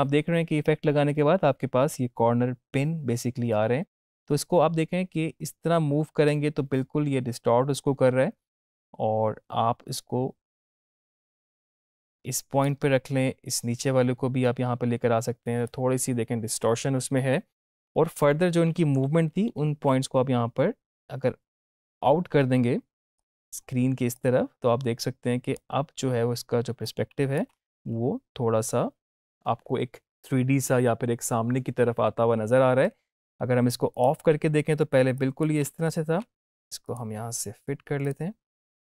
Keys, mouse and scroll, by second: 4.1-12.8 drag, 17.9 ctrl+-, 19.4 ctrl+=, 20.9-23.4 drag, 27.4 space, 32.8 space, 33.9 click, 35.6 space, 36.7-38.8 drag.